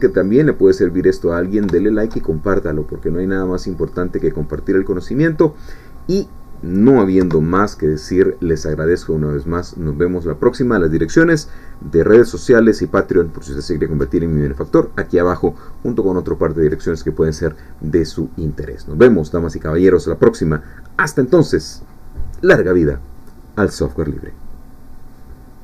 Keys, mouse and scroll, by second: 0.3-1.3 middle drag, 1.3-1.6 scroll up 1, 1.8-2.8 shift+middle drag, 2.8-4.1 drag, 4.3 scroll down 1, 4.6-6.2 middle drag, 6.2-7.0 scroll down 1, 7.2 1, 7.9-8.3 scroll down 1, 8.3 middle click, 9.2-9.5 scroll down 2, 9.5-11.1 scroll up 2.